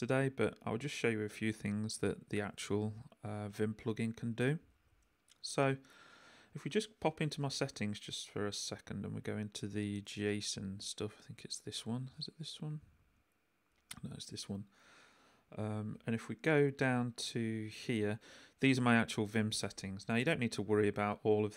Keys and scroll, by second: 5.5 j, 6.5 k, 7.2 super+k, 7.4 super+,, 20.0 Left.